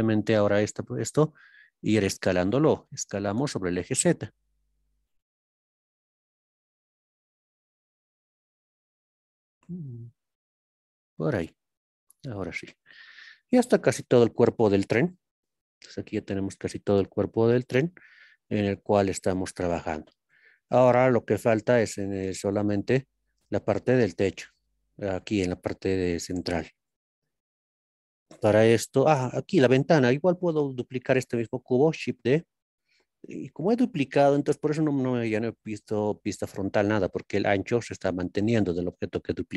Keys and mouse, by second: 0.4-1.1 shift+middle drag, 3.4 z, 14.8 shift+middle click, 15.2 shift+middle click, 22.1-23.2 middle drag, 27.1 ctrl+KP_3, 32.2 shift+d, 35.8 KP_1.